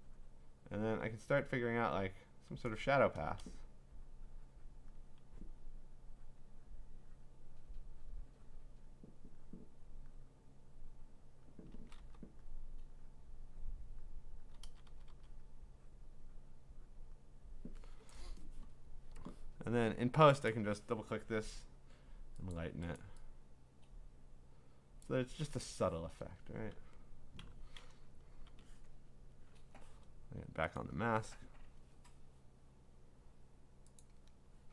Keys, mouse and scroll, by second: 1.6 click, 1.9 click, 3.1 ], 3.4 ], 4.9 click, 5.9 click, 6.8 click, 7.3 click, 8.8 click, 10.1 click, 10.7 click, 11.4 click, 11.7 [, 12.0 [, 12.4 click, 14.5 click, 14.6 ], 14.9 ], 15.1 ], 15.4 click, 15.5 click, 16.1 click, 17.0 click, 17.1 click, 20.3 click, 20.5 click, 22.5 click, 23.0 click, 25.0 click, 25.9 Return, 27.4-28.9 typing, 28.9 click, 30.8 click, 34.0 click.